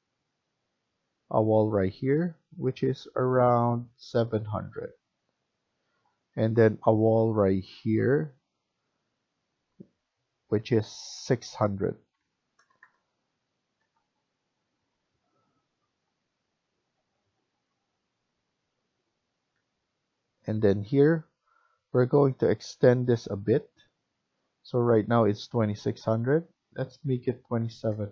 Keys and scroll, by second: 4.9 Escape, 12.0-12.4 typing, 13.7 Return, 14.6 Escape, 14.9 Escape, 27.0-28.1 typing.